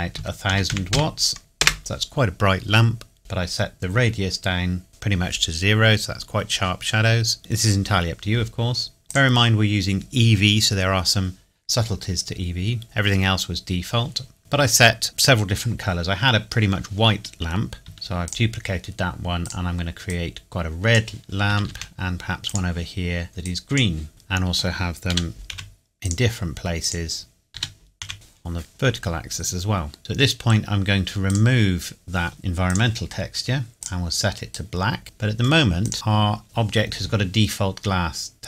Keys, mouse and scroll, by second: 0.1 KP_1, 0.5 KP_0, 1.6 KP_Enter, 4.9 click, 9.1 click, 17.8 shift+Num_Lock, 17.9 shift+d, 18.2 click, 21.5 shift+d, 22.4 click, 24.1 middle click, 25.1 g, 25.5 z, 26.0 click, 27.5 g, 28.0 z, 28.1 click, 28.6 middle click, 30.0 click, 31.3 click, 32.6 click, 35.0 middle click, 35.8 click.